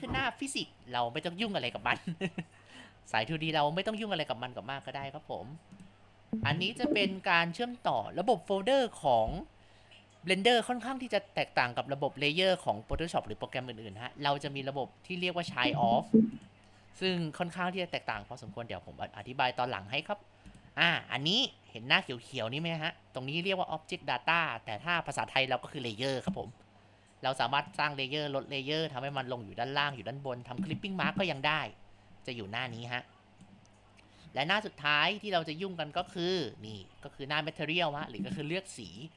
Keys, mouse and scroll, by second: 5.7 click, 6.9 click, 20.6 click, 27.7-35.8 drag, 36.0 click, 38.9 click.